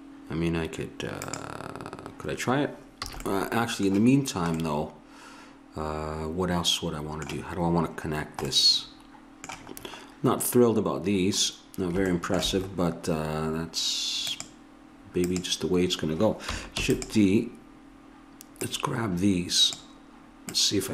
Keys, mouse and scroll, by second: 1.2-3.1 drag, 3.1 a, 8.2 click, 14.2 click, 16.8 shift+d, 20.6-20.9 drag.